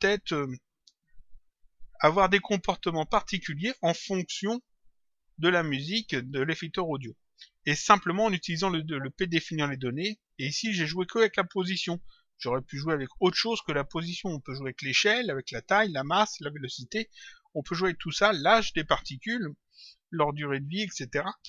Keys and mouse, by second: 12.7 click.